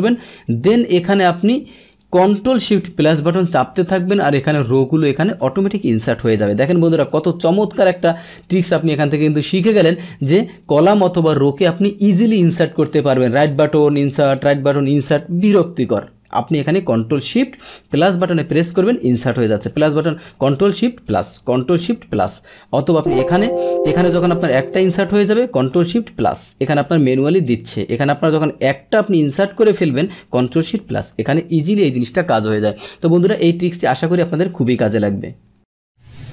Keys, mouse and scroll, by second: 0.7 right click, 1.6 right click, 1.9 click, 5.7 ctrl+z, 6.1 ctrl+z, 7.8 ctrl+z, 8.1 ctrl+z, 8.2 ctrl+z, 8.5 ctrl+z, 9.3 ctrl+z, 9.6 ctrl+z, 10.2 click, 13.4 right click, 14.2 click, 21.1 click, 22.9 click, 23.8 click, 24.6 click, 25.5 click, 27.3 click, 28.6 right click, 29.5 click, 31.6 ctrl+z, 32.0 ctrl+z.